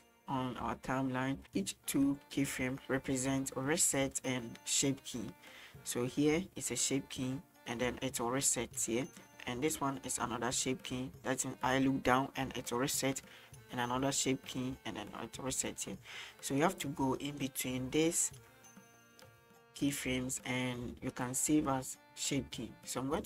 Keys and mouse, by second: 1.4-16.7 drag, 17.2 middle click, 17.7-21.2 drag.